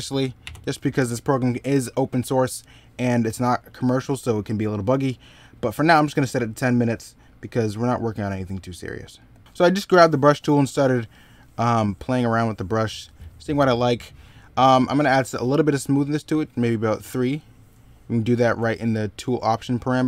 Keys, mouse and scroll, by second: 9.3 middle click, 14.4 ctrl+z, 18.2 ctrl+z.